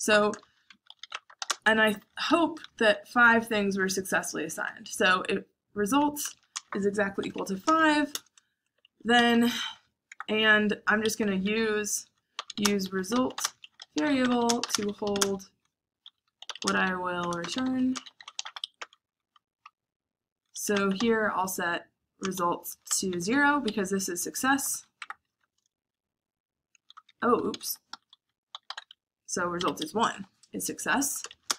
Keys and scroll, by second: 0.1-3.1 typing, 4.6-15.0 typing, 8.1 Return, 11.0 Escape, 16.1-18.3 typing, 19.3-21.0 typing, 22.1-31.5 typing, 29.7 Escape.